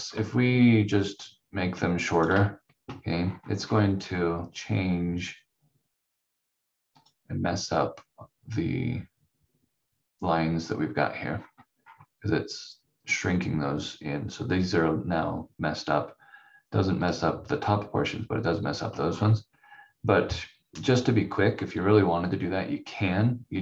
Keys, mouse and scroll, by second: 0.1 click, 11.3-11.8 scroll up 1, 17.0 click, 19.0 scroll down 1.